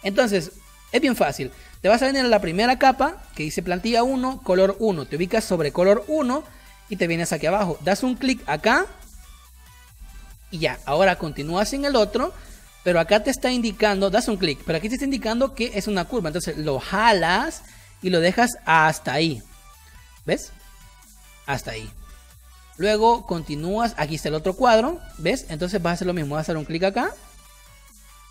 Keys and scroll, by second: 7.1 space, 11.4 space, 22.2 space, 24.8 space.